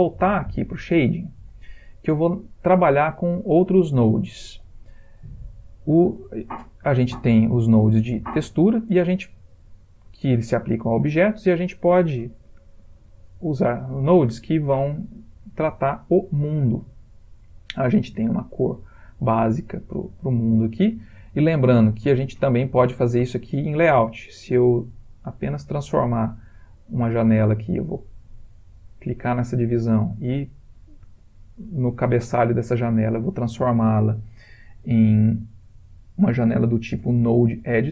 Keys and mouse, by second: 22.8 click, 25.5 click, 26.5 click, 28.4 click, 30.7 click.